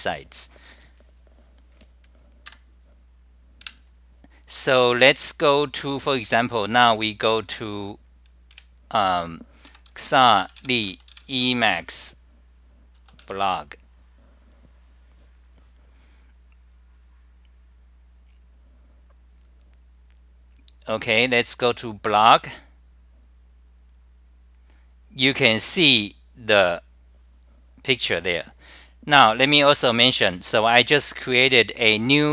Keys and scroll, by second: 2.5 ctrl+g, 3.7 super+w.